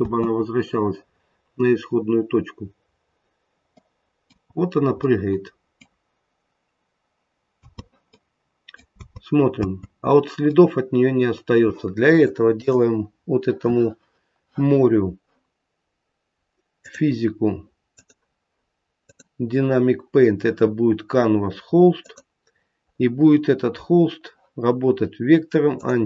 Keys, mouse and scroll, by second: 3.7 middle click, 4.4-5.3 scroll up 4, 4.9 middle click, 7.5 space, 8.0 middle click, 8.9 space, 9.5 space, 10.4 middle click, 12.5 click, 16.7 click, 17.8 click, 18.9 click, 21.9 click, 22.4-22.8 scroll down 1, 25.0-25.8 scroll down 10, 25.8 click.